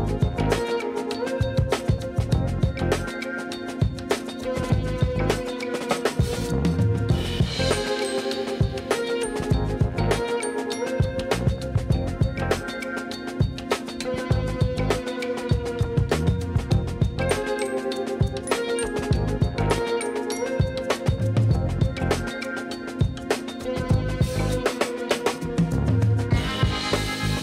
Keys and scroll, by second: 0.1 shift+z, 10.3 b, 12.0 7, 13.5 shift+d, 16.9 1, 19.4 g, 22.9 7, 25.5 shift+d, 27.0 r.